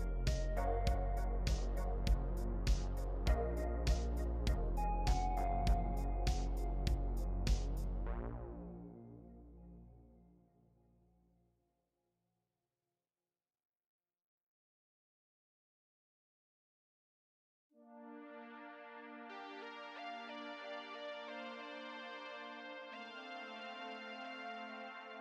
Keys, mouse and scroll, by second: 17.0 l.